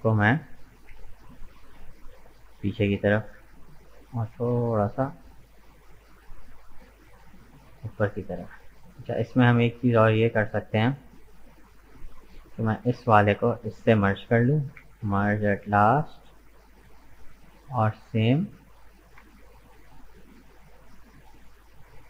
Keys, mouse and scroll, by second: 0.7 g, 4.2 g, 7.1-8.2 middle drag, 8.2-8.6 scroll up 2, 8.6 middle click, 9.5 Tab, 10.2 Tab, 11.7-12.8 drag, 12.8 right click, 13.6 shift+right click, 14.7 m, 15.9-18.7 middle drag, 18.7-19.3 scroll up 2, 19.3-21.3 shift+middle drag, 21.3 right click.